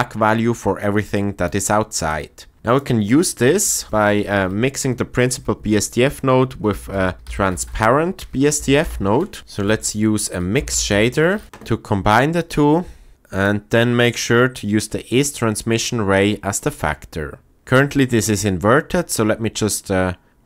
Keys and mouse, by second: 2.1 click, 3.4 shift+a, 9.4 shift+a, 11.4 Down, 15.2 click.